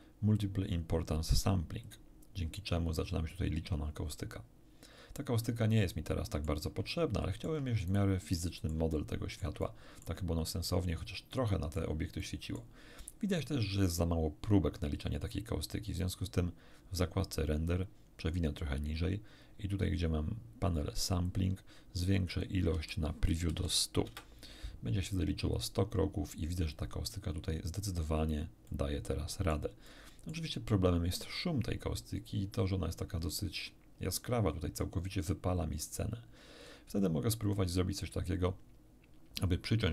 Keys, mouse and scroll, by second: 1.8 click, 5.9 middle click, 6.9 shift+middle click, 7.9 shift+middle click, 9.4 shift+middle click, 11.3 middle click, 12.2 middle click, 13.0 middle click, 16.0 click, 17.9-18.5 scroll down 2, 18.7-19.3 scroll down 2, 19.5-19.9 scroll down 2, 20.0-20.3 scroll down 2, 21.3 click, 22.3 click, 22.7 1, 23.5 0, 23.6 0, 24.1 Return, 28.7-29.7 middle drag, 29.9 middle click.